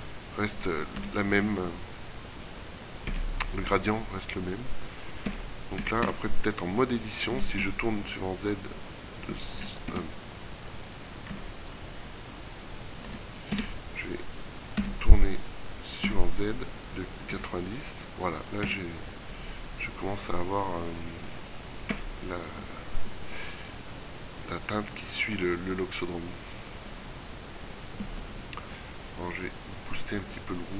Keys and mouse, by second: 1.1 r, 5.4 Tab, 5.9 a, 6.1 a, 7.4 r, 7.7 z, 8.7 KP_1, 10.0 Escape, 11.4 KP_3, 13.1 g, 14.9 r, 22.0 Tab, 22.4-23.4 middle drag, 29.5-30.7 drag.